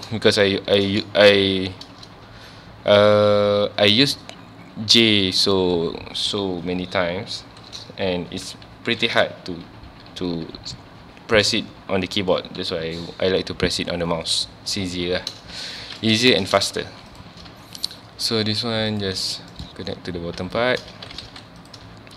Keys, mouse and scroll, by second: 0.4 shift+click, 1.3 ctrl+x, 15.8-16.2 shift+middle drag, 16.2 2, 16.3 click, 16.8 1, 17.1 click, 18.9 shift+click, 20.6 shift+middle click, 20.9 alt+a, 21.3 ctrl+s, 21.6 click.